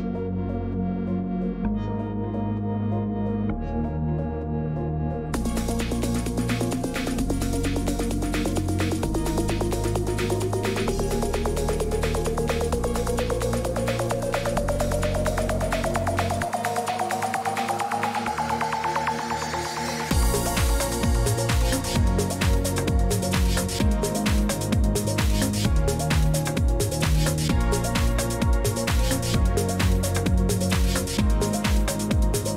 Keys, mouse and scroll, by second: 2.2 click, 3.3 click, 4.4 click, 28.0 click, 28.6-31.5 typing, 29.6 right click, 29.9-30.3 scroll down 8, 30.9 right click, 31.0-32.2 scroll, 32.2 click.